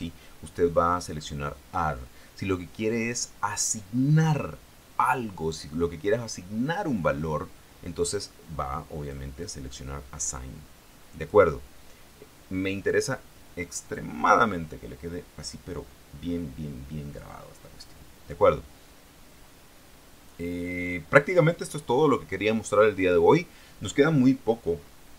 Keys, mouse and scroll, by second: 9.2 click, 9.6 click, 11.3 click, 13.3 click.